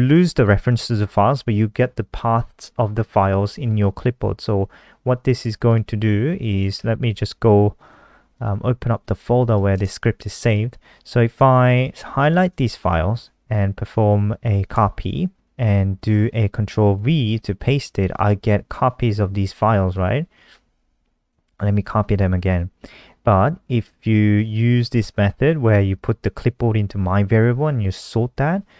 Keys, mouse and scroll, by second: 3.8 click, 5.4 click, 6.5 F3, 8.1 click, 12.0 shift+click, 14.5 ctrl+c, 16.7 ctrl+v, 19.3 Delete, 20.4 Right, 20.7 Down, 21.1 shift+Up, 21.3 shift+Up, 25.7 click.